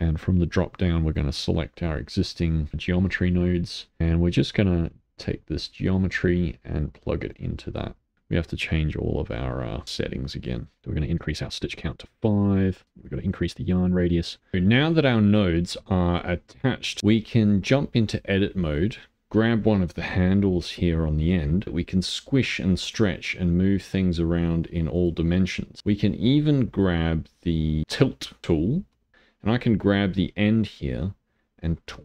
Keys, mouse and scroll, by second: 3.4 middle click, 4.0 scroll up 8, 4.2-5.7 shift+middle drag, 5.7-8.1 drag, 8.1 middle click, 9.0-11.7 drag, 11.7 middle click, 12.5 click, 12.8 middle click, 13.0-14.3 drag, 14.3-17.0 shift+middle drag, 17.0 Tab, 18.3-23.1 drag, 23.1-24.9 middle drag, 24.9 g, 25.5-29.6 middle drag, 29.6-32.0 drag.